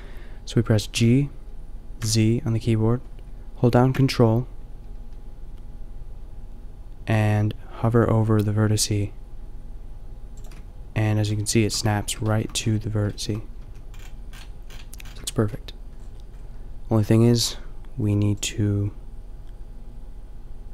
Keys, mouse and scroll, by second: 0.9 g, 10.4-11.6 drag, 11.6 middle click, 13.7 a, 18.0 b.